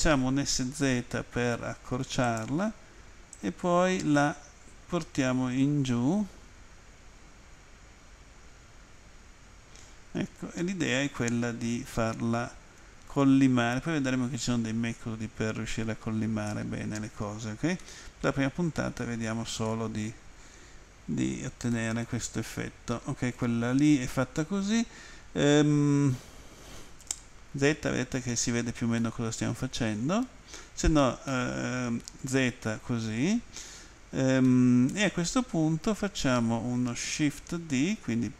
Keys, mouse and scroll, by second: 0.3-1.0 typing, 2.3 click, 3.4 click, 17.8 middle click, 20.0 middle click, 21.7 middle click, 29.0 middle click, 31.3 middle click, 34.5 middle click.